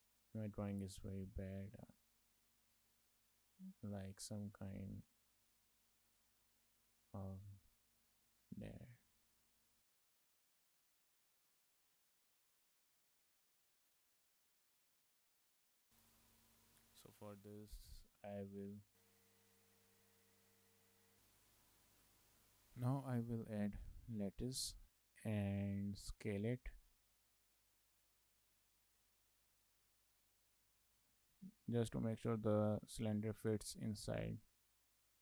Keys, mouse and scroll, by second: 0.5 click, 1.8 ctrl+z, 2.3 click, 4.8 click, 8.3 click, 9.8 click, 16.1 click, 18.4 click, 19.9 click.